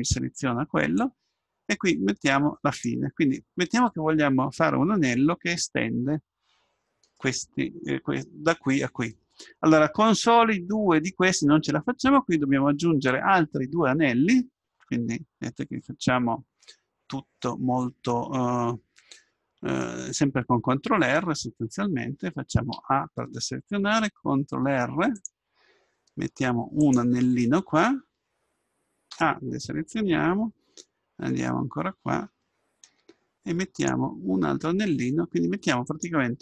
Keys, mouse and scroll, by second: 1.0-2.8 drag, 7.1-9.1 middle drag, 17.5-19.3 middle drag, 22.7 a, 24.7 ctrl+r, 29.1 a, 32.8 ctrl+r.